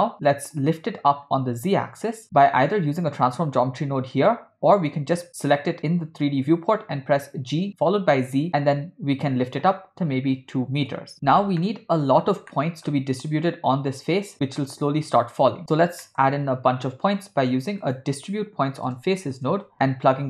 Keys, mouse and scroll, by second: 0.3 click, 7.1 g, 11.6-12.3 ctrl+middle drag, 12.5-12.9 shift+middle drag, 15.6 click, 16.0 middle click, 16.8 shift+a.